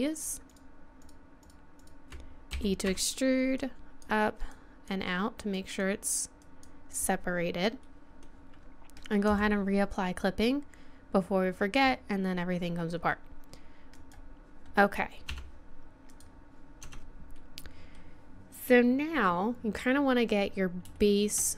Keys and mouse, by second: 2.5 e, 7.0 middle click, 7.9 middle click, 9.3 middle click, 10.0-11.9 drag, 13.9-17.3 drag, 15.3 Tab, 16.8 Tab, 17.3 middle click, 17.4 click, 17.4 middle click, 20.9-21.5 middle drag.